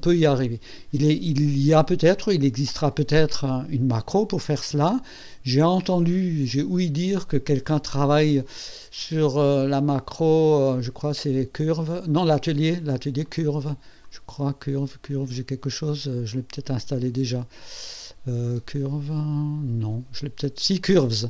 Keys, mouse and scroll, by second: 11.2 click, 13.2 click, 14.0 click.